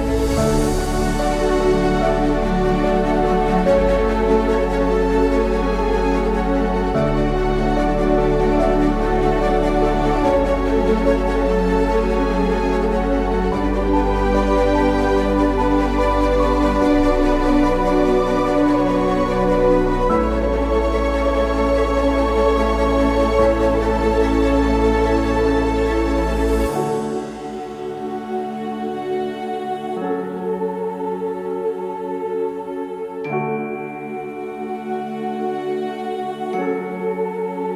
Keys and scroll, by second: 0.0-0.1 typing, 1.3 ctrl+z, 1.3-6.1 typing, 4.5 ctrl+/, 4.7 ctrl+Print, 5.1 ctrl+Print, 6.1 ctrl+Print, 6.4 ctrl+v, 6.4 ctrl+c, 8.3-9.4 typing, 10.9 typing, 12.2-13.4 typing, 14.1 ctrl+shift+t, 14.7 /, 20.1-26.6 typing, 27.8-33.4 typing, 34.7 typing, 36.6-37.7 typing.